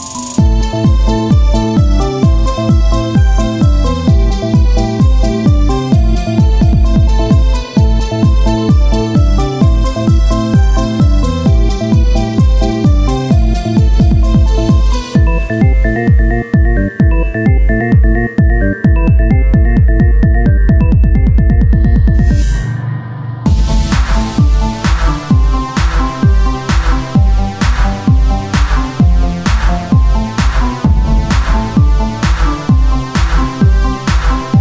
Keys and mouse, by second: 10.1 Tab, 10.2 Tab, 12.1-15.6 drag, 15.6 Tab, 15.8 Tab, 17.2-19.7 drag, 17.3 Tab, 19.0 Tab, 19.1 Tab, 19.7 ctrl+Tab, 20.1 z, 20.4-22.0 drag, 22.0 ctrl+Tab, 22.6-23.7 drag, 23.7 z, 24.4-26.3 drag, 24.4 z, 26.3 Tab, 26.3 z, 27.1-28.8 drag, 29.1 Tab, 33.2 Tab, 33.6 Tab.